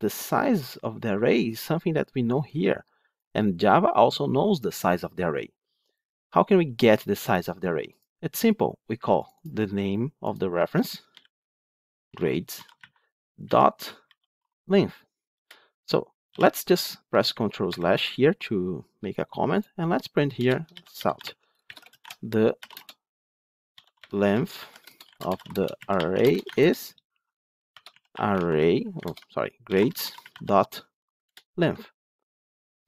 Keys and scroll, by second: 15.3 Return, 21.1 ctrl+/, 25.1 Tab, 28.9 ctrl+BackSpace, 31.1 Return.